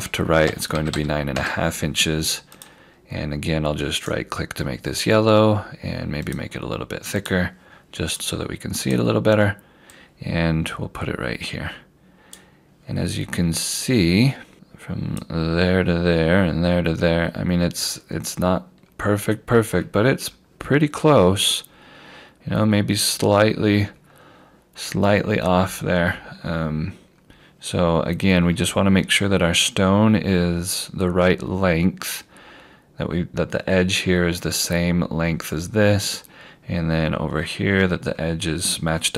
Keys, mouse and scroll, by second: 0.5-1.5 typing, 2.6 click, 4.0 right click, 6.3 click, 16.0-16.4 scroll down 1, 17.3 scroll up 1, 18.1 scroll down 1, 19.5 scroll up 1, 20.8-21.4 scroll up 1, 24.0-25.4 scroll down 1, 25.5-26.0 scroll up 1, 26.1 scroll down 1, 30.2 scroll up 1, 34.6 click, 35.5-35.9 scroll down 1, 36.9 scroll up 1.